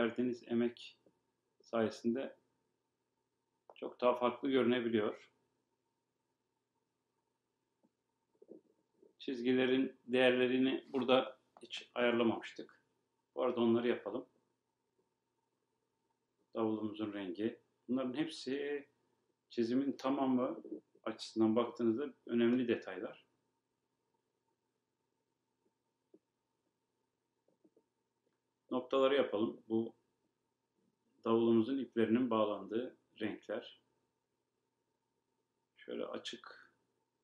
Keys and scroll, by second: 22.2 super+z.